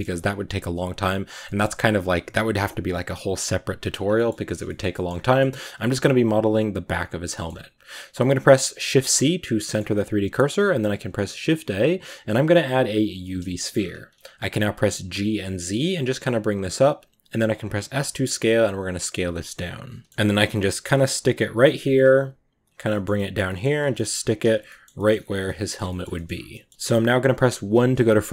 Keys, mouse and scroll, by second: 1.7-3.4 scroll up 1, 3.4-3.9 scroll up 1, 3.9 scroll down 1, 4.0 middle click, 4.9 scroll down 1, 5.1-6.8 middle drag, 6.8-8.7 scroll down 5, 7.2-7.6 shift+middle drag, 8.7 scroll down 1, 8.7 shift+c, 9.1-13.3 middle drag, 13.3 shift+a, 13.4 shift+middle drag, 13.6-14.5 shift+scroll up 5, 14.6 g, 17.4 s, 20.1 middle click, 20.2 g, 21.4 middle click, 21.7 g, 22.7-23.3 middle drag, 23.3 g, 23.8 middle drag, 23.9 scroll up 2, 24.1 s, 24.5 middle click, 24.8 g, 25.3 middle drag, 25.6 scroll down 2, 25.7-26.2 shift+middle drag, 26.2 scroll down 1, 26.4-27.5 middle drag, 27.5 KP_1, 28.1-28.3 scroll up 1.